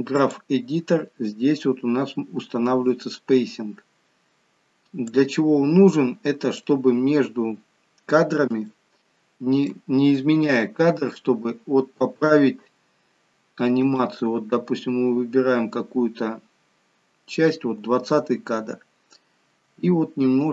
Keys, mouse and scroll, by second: 1.6-3.5 scroll down 4, 3.5 scroll down 1, 5.4 click.